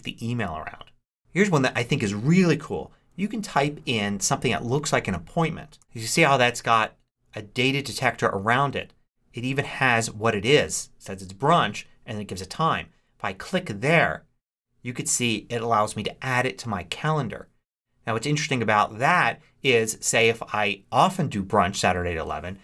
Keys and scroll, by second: 5.7 shift+b, 5.8 Return.